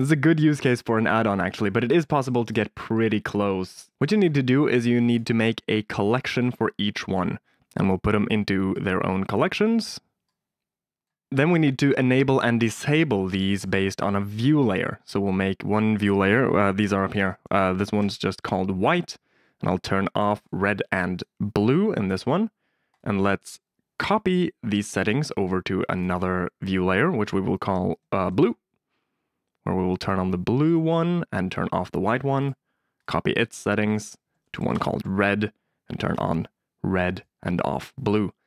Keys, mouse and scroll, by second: 1.9 shift+a, 3.6 Tab, 4.7 middle click, 5.1 click, 5.5 click, 5.6 click, 6.3 shift+click, 7.0 shift+click, 8.7 click, 10.2 click, 15.3-17.9 drag, 20.3 click, 21.1 click, 22.9-24.3 drag, 25.9-28.3 drag, 30.6 click, 32.4-33.6 drag, 33.8 shift+click, 36.0 click, 37.0 click.